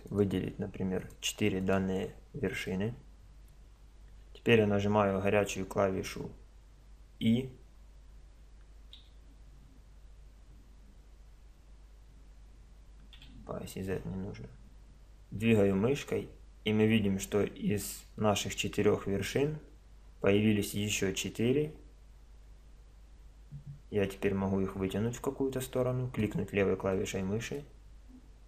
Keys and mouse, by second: 0.1-2.0 right drag, 2.0-4.7 middle drag, 9.0 e, 26.9-28.4 middle drag.